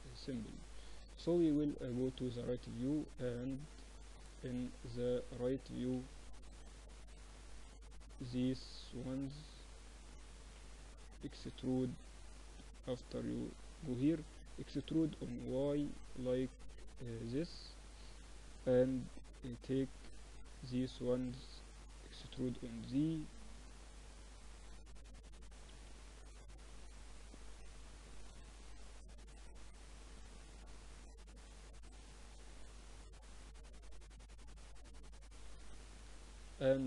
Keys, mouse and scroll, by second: 0.9 KP_3, 2.4-4.4 drag, 4.5 Tab, 5.5-7.1 typing, 8.3-10.2 drag, 9.4 a, 10.3 b, 12.1-13.9 drag, 14.4 e, 17.7 a, 19.1 b, 21.9 e, 24.8 a, 25.6 b, 26.7-28.6 drag, 28.0 a, 29.0 b, 30.2-32.1 drag, 31.2 a, 32.0 b, 33.9 z, 34.3-36.8 drag, 34.9 z, 35.5 Tab.